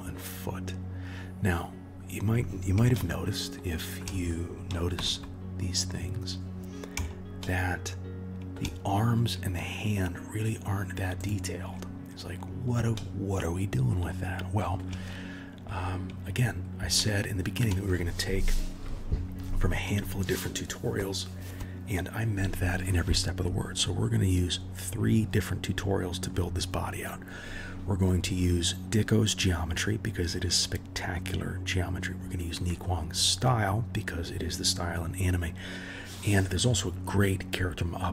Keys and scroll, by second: 4.9 KP_1.